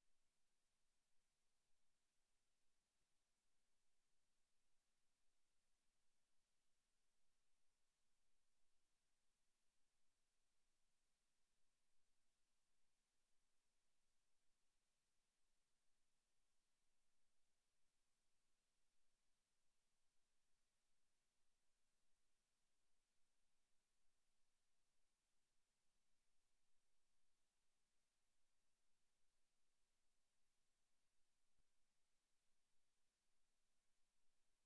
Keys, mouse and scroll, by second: 0.2 alt+shift+right click, 0.6 s, 1.8 ctrl+z, 1.8 ctrl+click, 2.3 middle click, 3.6 z, 4.1 b, 5.6 s, 6.6 Tab, 6.6 click, 7.0 z, 9.2 s, 9.8 click, 10.0 s, 10.7 s, 12.4 click, 12.6 Tab, 13.3 Tab, 13.6 z, 14.4 z, 14.7 Tab, 15.2 Tab, 16.6 r, 18.8 middle click, 20.5 shift+middle click, 21.2 middle click, 21.9 shift+middle click, 22.4 middle click, 26.6 ctrl+alt+KP_0, 28.4 right click, 29.0 shift+f, 30.0 click, 30.5 g, 32.0 click, 32.5 right click, 32.7 g, 33.4 click, 33.9 KP_7.